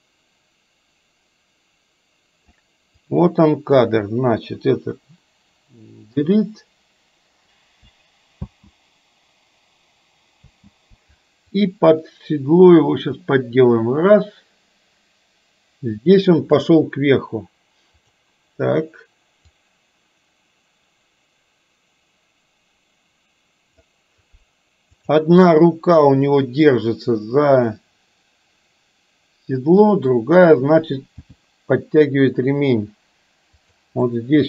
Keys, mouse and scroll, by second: 3.2-3.9 drag, 6.1 Delete, 8.4 space, 10.6 space, 11.6-16.7 drag, 17.9 click, 19.4-23.9 drag, 25.1 click, 25.4-30.2 middle drag, 31.3 g, 34.2-34.4 middle drag.